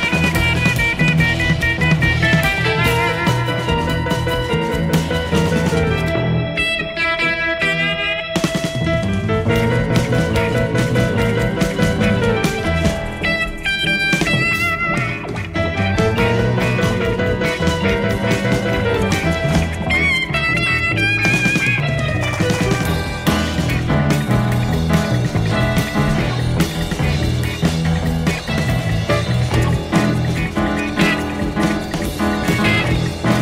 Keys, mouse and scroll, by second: 0.0 KP_Subtract, 1.2 space, 4.2 space, 14.4 shift+F6, 15.2 space, 19.0 click, 24.7 click, 27.0 click, 28.7 click, 30.1 click, 31.2-32.8 drag, 33.2 click.